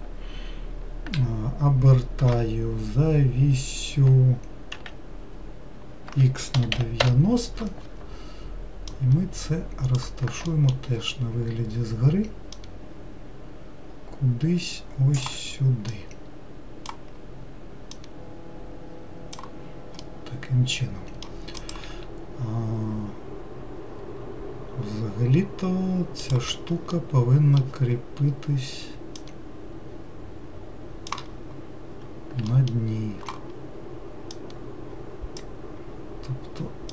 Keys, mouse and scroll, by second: 2.6 r, 9.2 click, 10.8 alt+middle click, 12.8 click, 16.2 click, 18.2 click, 20.3-23.4 middle drag, 27.2-29.4 middle drag, 29.4 click, 32.8 alt+middle click, 34.6 click.